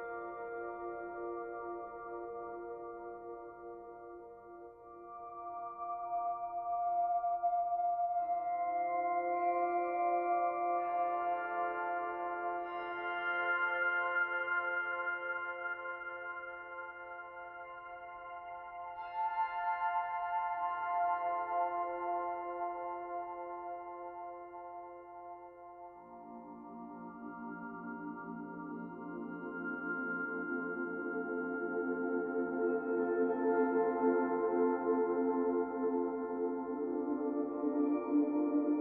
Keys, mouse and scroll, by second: 0.0 click, 0.5 ctrl+a, 3.3 click, 3.8 shift+click, 4.0 shift+click, 4.5 middle click, 5.3 ctrl+a, 8.9 click, 9.4 ctrl+a, 11.3 click, 11.7 ctrl+a, 13.2 middle click, 15.2 middle click, 15.8 click, 16.5 shift+click, 17.5 ctrl+a, 19.4 click, 20.0 ctrl+a, 21.7 middle click, 23.4-23.8 scroll down 1, 23.8 middle click, 31.2 middle click, 34.1 middle click, 35.3 click, 35.6 middle click, 37.4 ctrl+a.